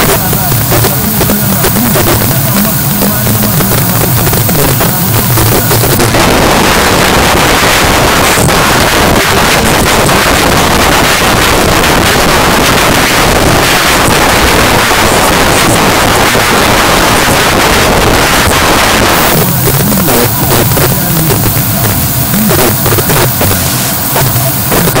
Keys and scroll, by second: 5.9 Page_Down.